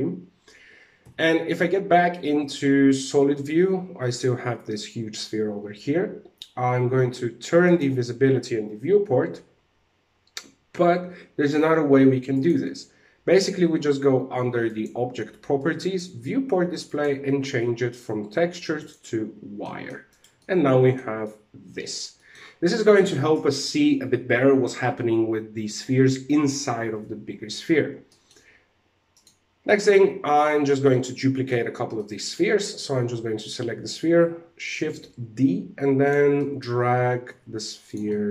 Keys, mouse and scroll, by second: 0.5 z, 1.0 middle click, 3.6 right click, 7.2 click, 11.8 click, 14.2 click, 15.3 click, 16.3 click, 19.2 shift+middle click, 19.6 right click, 19.9 middle click, 20.7 shift+middle click, 21.7 middle click, 27.4 scroll up 1, 27.6 middle click, 28.7 right click, 29.2 middle click, 30.4 middle click, 31.4 middle click, 34.5 shift+d, 35.8 middle click, 36.8 shift+d, 37.6 middle click.